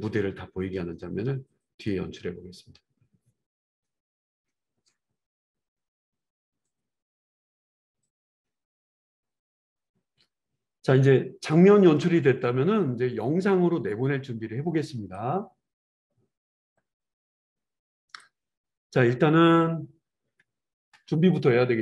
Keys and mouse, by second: 10.0-21.8 drag.